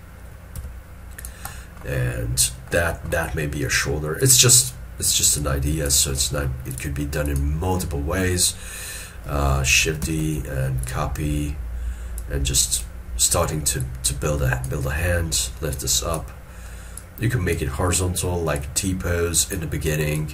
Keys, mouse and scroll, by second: 0.7 s, 1.6 middle click, 9.9 double click, 10.1 shift+d.